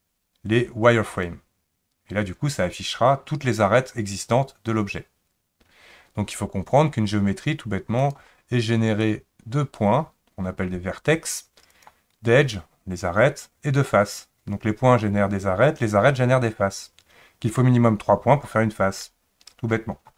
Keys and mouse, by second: 8.1-12.2 drag.